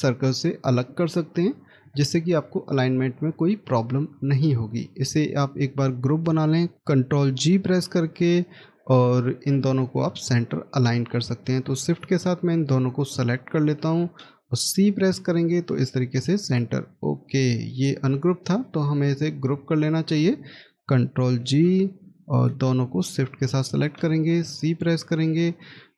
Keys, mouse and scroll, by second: 1.4 Delete, 7.3 ctrl+g, 9.0 middle click, 13.7 shift+click, 17.7 ctrl+z, 21.0 ctrl+g, 23.3 shift+click, 24.3 x.